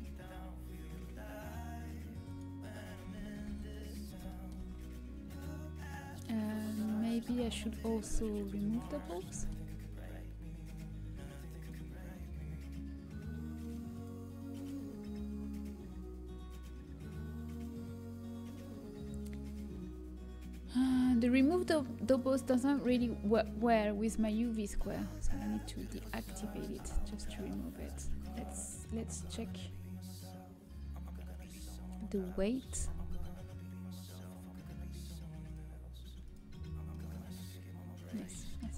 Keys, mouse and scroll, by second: 3.2 a, 4.3-11.0 middle drag, 13.2 click, 25.1-27.5 middle drag, 26.7 z, 36.6-38.5 middle drag.